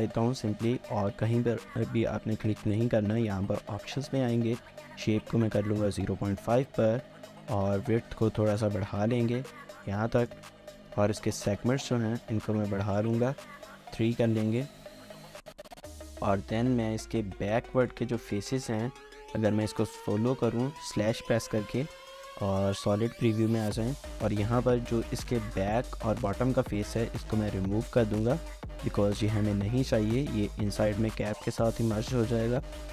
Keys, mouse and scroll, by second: 7.8 shift+click, 14.9 scroll down 1, 15.2 shift+middle click, 15.8 scroll down 1, 15.9 shift+middle click, 16.2 middle click, 18.0 3, 18.1 shift+middle click, 20.9 typing, 21.7 middle click, 26.0 shift+click, 26.8 middle click.